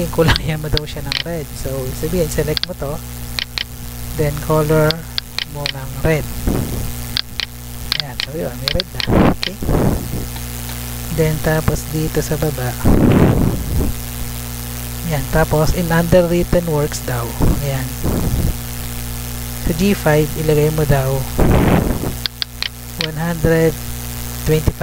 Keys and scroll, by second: 1.6 Tab, 10.7 Tab.